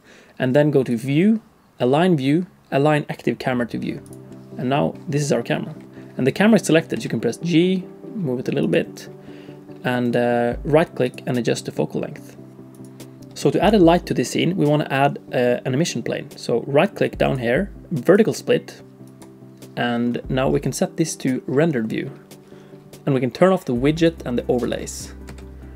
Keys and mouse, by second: 1.0-6.9 drag, 6.9 g, 10.0-13.0 right drag, 17.2-19.3 right drag, 24.0 click, 24.6 click, 25.3 t.